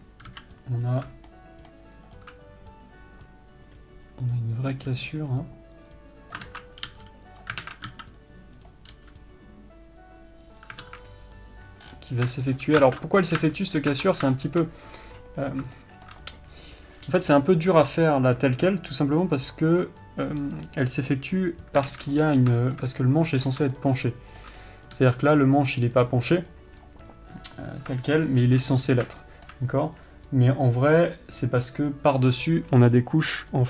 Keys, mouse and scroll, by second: 0.2-1.2 scroll up 2, 1.2 b, 5.1 g, 6.8 ctrl+z, 7.3 g, 8.0 alt+a, 8.9 b, 11.2 alt+a, 12.2-12.7 scroll down 2, 12.7-33.6 shift+middle drag.